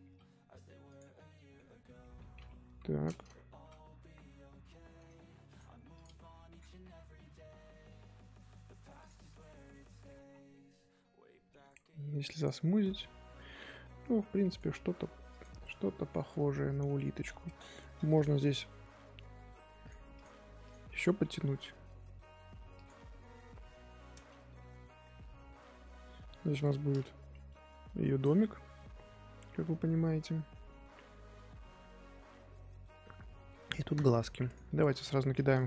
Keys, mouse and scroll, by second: 0.0 g, 1.0-2.6 middle drag, 2.6 KP_1, 3.5 g, 5.9 click, 9.3 middle click, 10.2 scroll down 1, 10.5-11.6 middle drag, 11.6-12.6 right drag, 12.6-14.5 middle drag, 14.5-15.7 right drag, 15.7 KP_3, 16.9-17.5 scroll up 1, 17.6 Tab, 18.1 click, 20.1 click, 20.6 click, 22.9-24.3 middle drag, 24.3 Tab, 24.6-27.2 middle drag, 27.2 KP_3, 34.4 click, 34.9-35.6 middle drag.